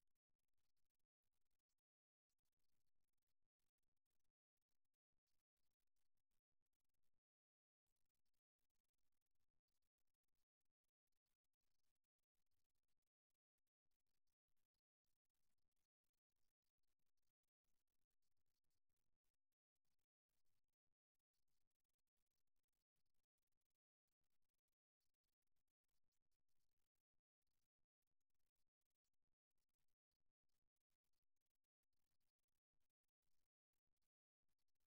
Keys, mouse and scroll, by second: 0.5 click, 1.3-4.4 middle drag, 11.0 e, 17.8 e, 25.0 KP_1, 29.3-32.4 middle drag, 32.4-34.8 drag, 34.2 right click, 34.8 middle click.